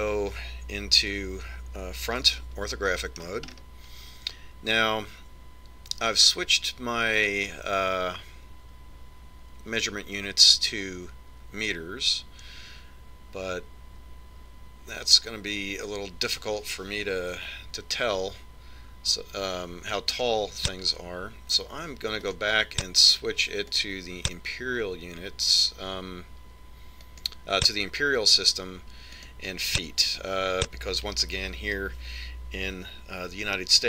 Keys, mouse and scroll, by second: 1.3 KP_5, 2.7-4.4 scroll up 1, 4.4-5.6 scroll up 1, 5.6 scroll up 1, 20.5 click, 22.7 click, 27.5 click, 30.6 click.